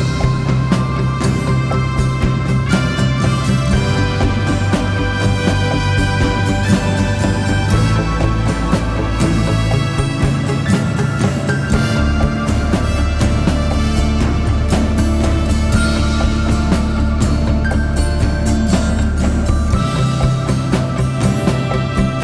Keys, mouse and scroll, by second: 19.9-22.2 typing.